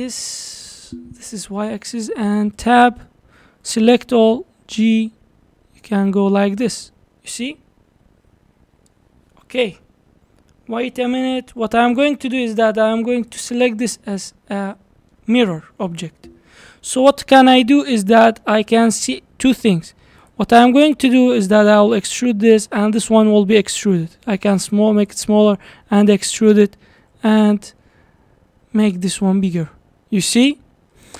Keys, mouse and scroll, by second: 2.6 Tab, 3.7 a, 4.5 g, 12.6 click, 14.3-16.9 middle drag, 16.9-17.6 scroll up 2, 17.6-18.6 middle drag, 18.6 scroll down 2, 18.9 shift+middle click, 19.4-20.2 scroll up 2, 20.2 click, 21.7 e, 22.7 scroll down 4, 24.0 s, 25.8 e, 27.0 s, 29.3-29.6 scroll down 3, 29.6-31.1 middle drag.